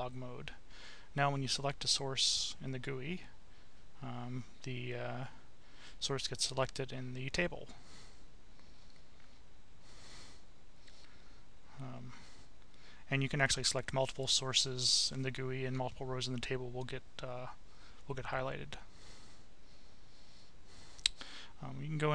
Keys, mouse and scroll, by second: 3.6 click, 5.2 click, 8.6 right click, 9.6 click, 11.8 click, 17.0 click.